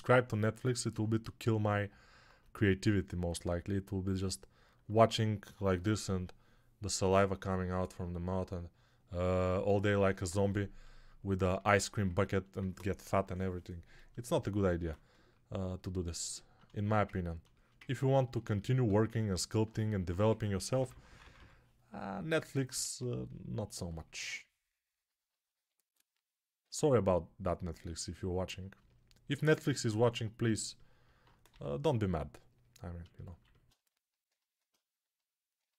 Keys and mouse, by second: 17.1-18.2 alt+shift+right drag, 18.2-35.7 ctrl+alt+drag, 20.1-21.2 typing, 22.7 alt+q, 26.4 z, 31.3 g.